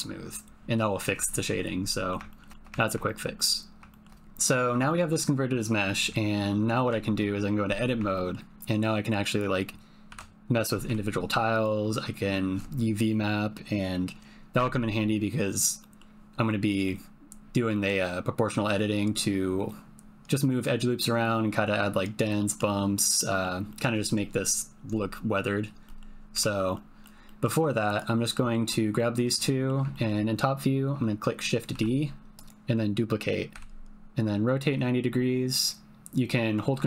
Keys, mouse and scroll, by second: 1.8 middle click, 2.3 shift+middle click, 2.7 ctrl+click, 3.0 shift+click, 3.3 click, 3.9 shift+click, 4.8 shift+click, 6.1 ctrl+middle click, 6.8 Tab, 8.1 ctrl+middle click, 10.1 ctrl+l, 10.8 g, 15.8 middle click, 16.6 middle click, 17.7 middle click, 22.4 middle click, 23.1 middle click, 23.6 middle click, 25.8 middle click, 26.4 Tab, 26.7 middle click, 27.2 click, 28.3 shift+click, 28.9 click, 29.9 ctrl+click, 31.7 shift+d, 33.5 r.